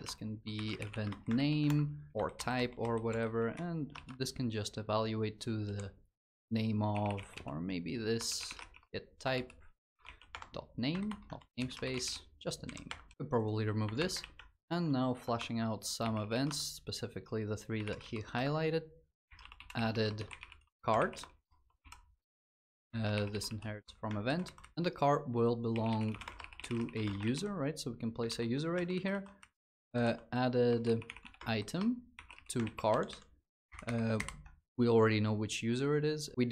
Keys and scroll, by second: 1.6 ctrl+s, 2.1 ctrl+BackSpace, 9.0 Return, 10.8 ctrl+BackSpace, 12.6 Return, 13.6 alt+Return, 14.0 ctrl+s, 16.2 Return, 23.6 Return, 27.1 ctrl+s, 28.0 ctrl+d, 32.4 ctrl+s, 33.4 ctrl+Delete.